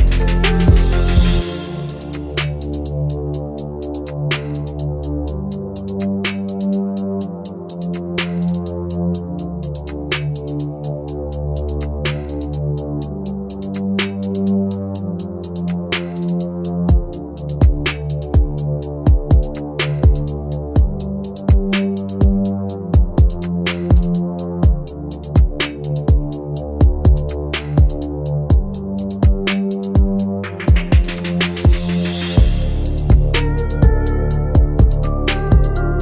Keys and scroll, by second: 9.1 shift+Page_Down, 9.6 Escape, 20.2 Delete.